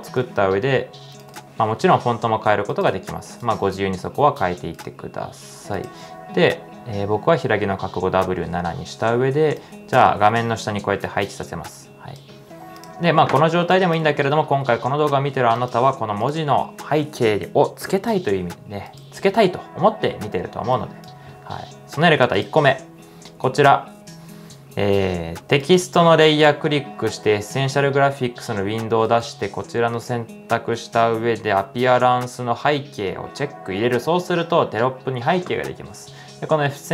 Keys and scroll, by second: 0.9-1.7 typing, 12.8-15.0 typing.